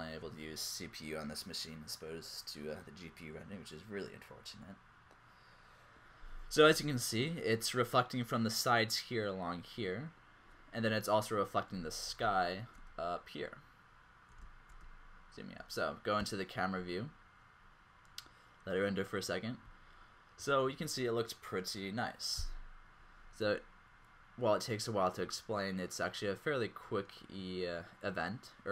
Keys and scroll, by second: 11.8-12.9 typing, 14.6 typing, 16.2 typing.